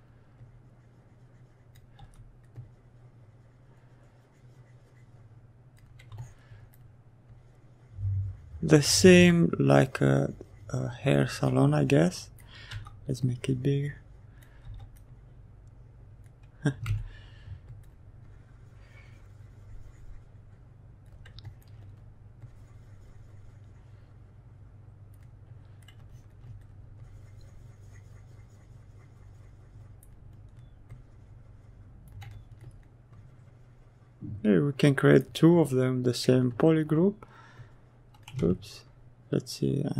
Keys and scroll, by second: 0.8 s, 11.1 s, 13.0 s, 15.3 ctrl+z, 35.8 ctrl+z.